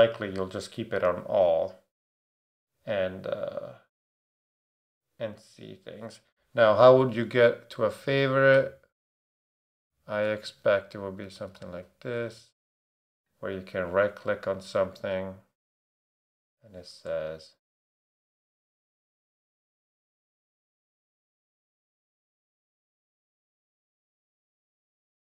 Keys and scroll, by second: 6.9 /, 8.0-11.8 typing, 10.2 Return, 12.1 Return, 16.7 Return, 18.3 Return, 19.9-24.3 typing, 23.3 Right, 24.1 Right.